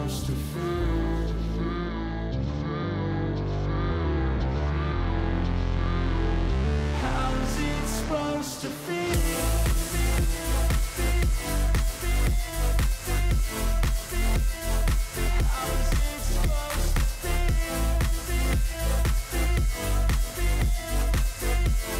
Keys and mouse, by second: 2.1 alt+shift+click, 4.1 alt+shift+click, 5.0 click, 6.0-7.0 drag, 9.2 alt+shift+click, 9.8 click, 9.9 click, 10.9-12.0 drag, 13.4 alt+shift+click, 14.0 click, 15.0-16.2 drag, 17.4 click, 18.4 click, 19.7 click, 20.5 click, 21.3 click, 21.9 click.